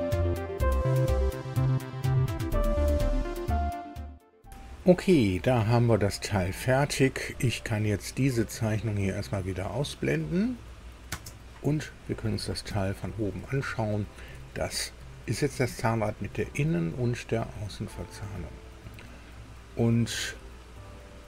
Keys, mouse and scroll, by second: 1.9 alt+Tab, 2.4 click, 2.6 click, 2.7 middle click, 2.8 alt+Tab, 4.5 alt+Tab, 4.8-6.9 alt+middle drag, 8.5 click, 11.1 space, 12.6 KP_2, 13.6 shift+middle click, 17.5-17.9 scroll up 2, 20.9-21.2 scroll down 2.